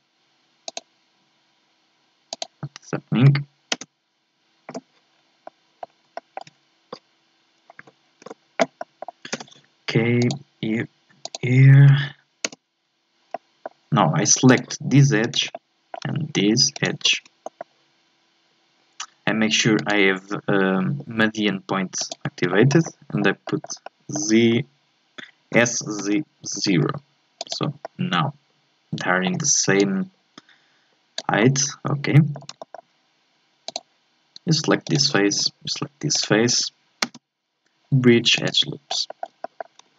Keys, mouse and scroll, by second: 5.1 scroll down 3, 5.4-6.1 scroll up 3, 5.4 middle click, 6.1-7.8 shift+middle drag, 7.8 a, 8.2 a, 8.8 middle click, 9.3 k, 13.3-14.5 middle drag, 14.5 click, 15.2 right click, 15.5-16.7 middle drag, 16.7 shift+right click, 17.4-19.8 middle drag, 19.8-22.5 drag, 22.5-25.6 shift+middle drag, 25.6 s, 27.8-29.8 middle drag, 29.8-31.4 drag, 31.4-33.6 middle drag, 33.6-34.8 drag, 34.8-37.0 right drag, 37.0 space, 38.9 scroll down 2, 39.1 shift+middle click, 39.8 Tab.